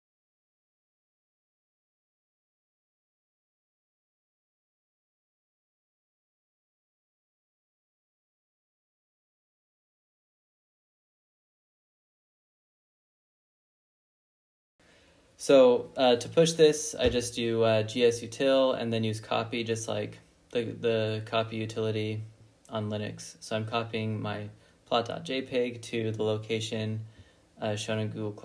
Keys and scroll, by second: 1.1-1.7 typing, 3.2-3.9 typing, 4.4 Return, 13.8 ctrl+l, 14.4 typing, 17.8-21.2 typing, 22.7-27.3 typing, 24.9 Tab, 25.4 Tab.